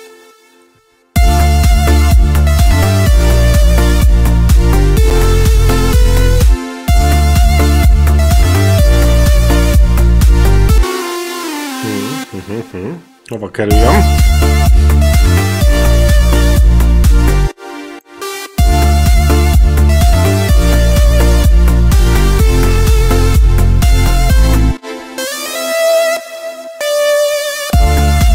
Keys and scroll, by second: 1.0 space, 6.3 space, 10.6 space, 13.5 space, 17.3 space, 24.5 space, 27.5 space.